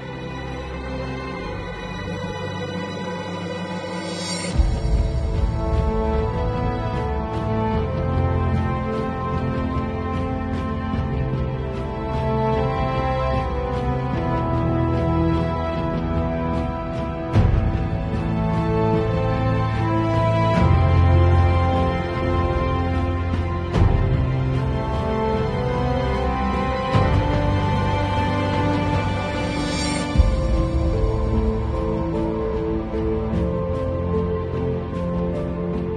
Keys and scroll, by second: 2.3 [, 4.9 space, 6.5-9.1 typing, 10.2 ], 10.8 space, 11.2 ], 12.4-17.7 typing, 25.9 [, 27.1 0, 33.4 space.